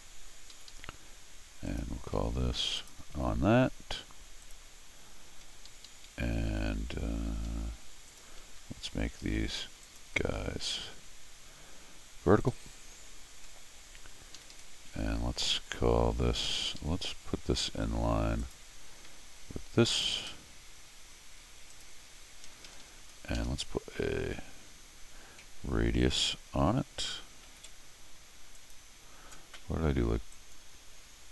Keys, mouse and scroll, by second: 0.5 Escape, 0.7 Escape, 1.7 click, 2.8 ctrl+click, 4.4 click, 5.4 Escape, 5.7 Escape, 5.9 Escape, 6.5 d, 7.5 Escape, 8.1 click, 9.8 ctrl+click, 12.4 click, 13.2-13.5 scroll down 4, 14.4 Escape, 14.5 Escape, 14.9 d, 16.6 Escape, 16.8 Escape, 18.4 click, 19.9 ctrl+click, 21.7 ctrl+click, 22.5 ctrl+Escape, 22.7 ctrl+Escape, 22.8 ctrl+Escape, 23.1 ctrl+click, 23.4 ctrl+Escape, 27.4 ctrl+alt+u, 28.6 ctrl+click, 30.3 ctrl+click.